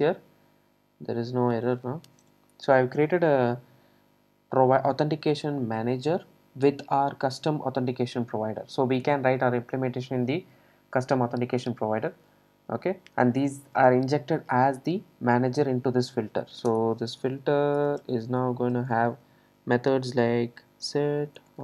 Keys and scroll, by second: 17.8 Return.